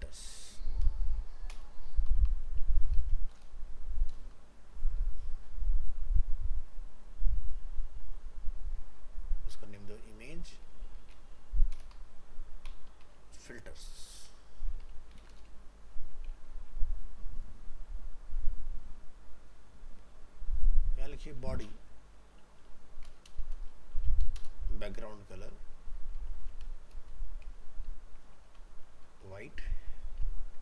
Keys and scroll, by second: 16.5 ctrl+s, 27.9 ctrl+shift+Left.